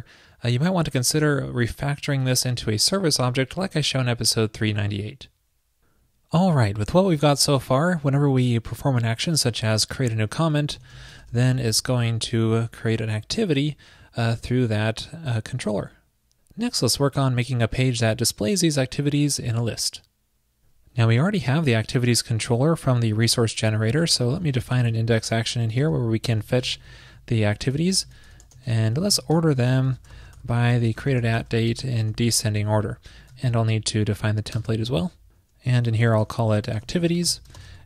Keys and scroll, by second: 23.7 super+Return, 32.7 super+s, 33.5 alt+super+Down, 36.3 ctrl+shift+<, 37.7 super+Return.